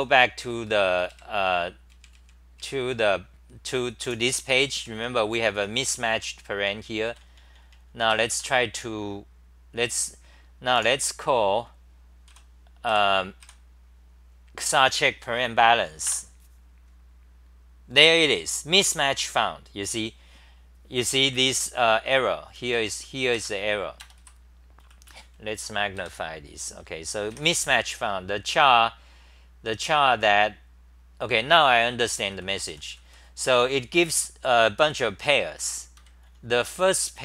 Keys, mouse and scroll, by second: 1.9 ctrl+Tab, 4.0-8.8 typing, 10.9 a, 12.3 Up, 16.1 Return, 22.5 t, 23.3 ctrl+g, 24.8-27.3 typing, 32.1-34.5 typing, 36.0 ctrl+g, 36.2 n, 36.4 n.